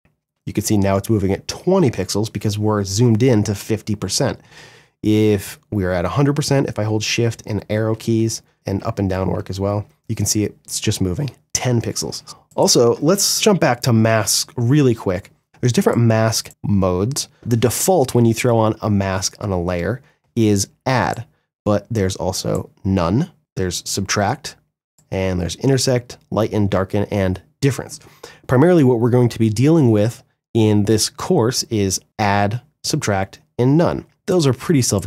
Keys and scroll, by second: 0.1 shift+Right, 0.6 shift+Left, 1.2 shift+Right, 5.9 shift+Left, 6.4 shift+Right, 6.8 shift+Left, 7.3 shift+Right, 7.7 shift+Left, 8.0 shift+Right, 8.4 shift+Up, 8.6 shift+Down, 9.0 shift+Left, 9.3 shift+Right, 9.7 shift+Left, 10.2 shift+Right, 12.9 m.